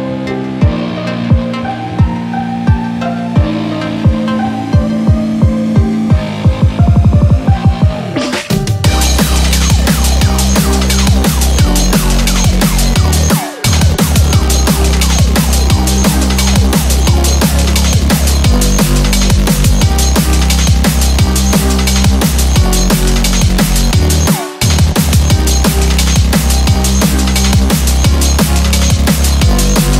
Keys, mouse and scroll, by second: 24.1 click, 24.1 r, 26.1 click, 26.2 click, 26.2 r, 26.8 g, 28.3 click, 28.3 g, 29.2 click, 29.4 e.